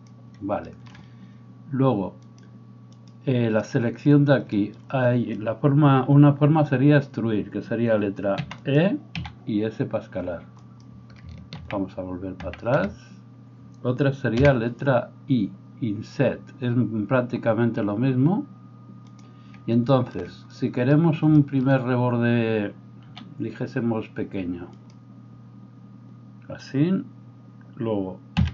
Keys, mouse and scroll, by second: 2.2-8.7 drag, 8.5 e, 8.7-28.5 middle drag, 9.2 s, 11.5 ctrl+z, 12.8 ctrl+z, 14.5 i, 23.1 s, 28.4 e.